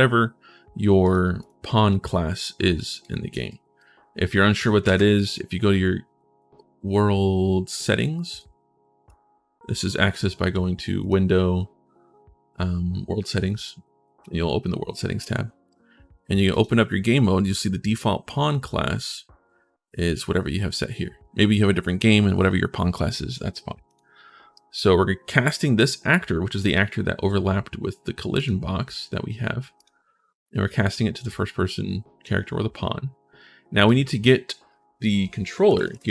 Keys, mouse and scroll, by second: 0.8 click, 1.2 click, 2.8 click, 3.3 right click, 4.6 ctrl+shift+s, 8.9-9.6 scroll down 1, 10.8 click, 23.7 click, 24.3 right click, 28.2 click, 29.6 click, 31.1 click, 33.6 click, 35.2-36.1 typing.